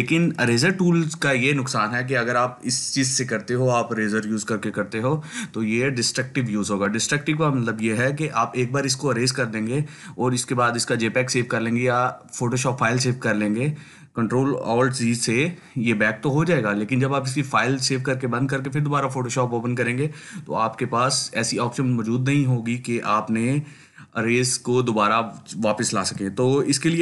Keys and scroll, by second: 26.3 ctrl+alt+z, 26.7 ctrl+alt+z.